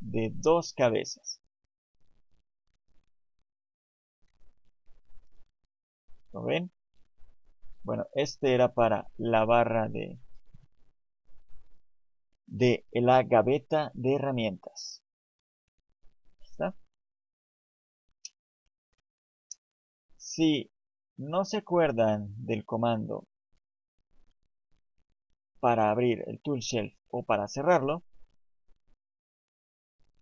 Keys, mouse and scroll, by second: 1.4 click, 5.3 click, 7.6 click, 16.2 click, 17.6 click, 25.6 click.